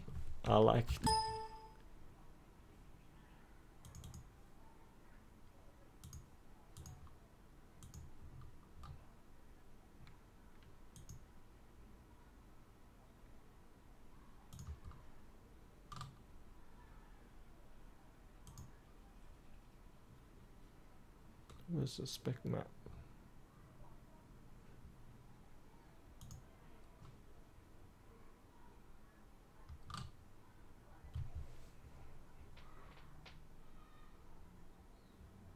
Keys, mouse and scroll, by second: 0.8 typing, 3.7 click, 10.9 click, 14.8-17.8 scroll down 1, 18.4 click, 20.0-23.1 scroll up 1, 26.1 click, 26.9-28.5 scroll down 1.